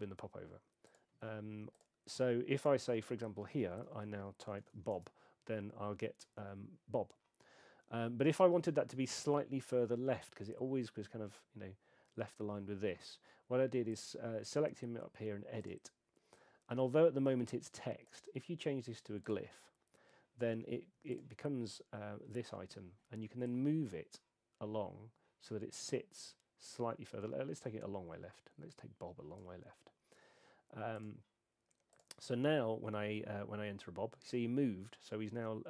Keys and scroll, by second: 4.6 shift+b, 4.9 Return.